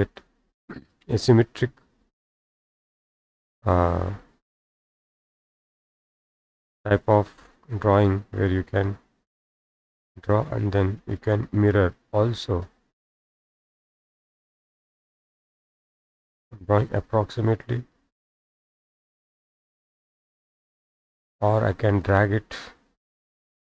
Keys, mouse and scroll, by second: 1.2-1.5 scroll down 1, 1.5 scroll up 1, 2.8-3.1 scroll up 1, 3.2 middle click, 3.2-3.7 scroll, 3.6 middle click, 6.4 click, 8.6 click, 10.1 click, 12.7 click, 14.1-15.3 drag, 15.4-16.8 drag, 19.6 click, 19.8 Escape, 20.1 Escape, 20.2 scroll down 1, 20.2 scroll down 1, 20.3 scroll down 1, 21.1 click, 22.1 click, 22.8 Delete.